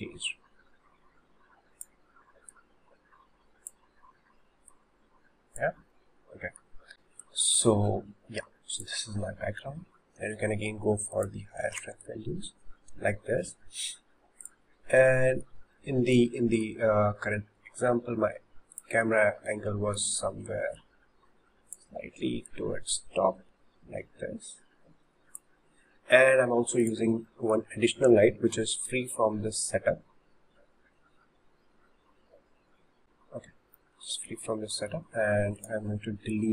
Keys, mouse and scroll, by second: 2.5 click, 4.7 click, 6.2-7.3 middle drag, 7.3 click, 11.1-14.5 drag, 15.3-18.7 shift+middle drag, 18.7 click, 20.8 click, 22.5 click, 26.1-26.9 scroll up 3, 26.9 click, 27.7-32.2 shift+middle drag, 32.2 shift+d, 34.1-34.5 scroll down 2, 34.5-36.5 shift+middle drag, 35.6 click.